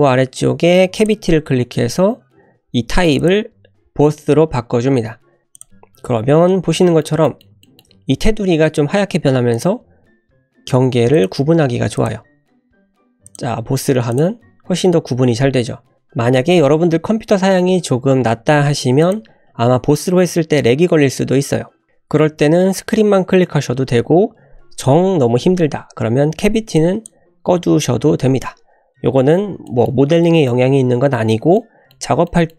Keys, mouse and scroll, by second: 6.5-7.0 scroll up 3, 6.9 shift+middle click, 7.2 middle click, 7.6 shift+middle click, 9.5-14.3 drag, 16.6-28.5 drag, 28.6 scroll down 2, 29.7 shift+middle drag, 30.0 scroll down 1, 30.2 middle click, 31.6-31.9 middle drag, 32.3 shift+middle drag.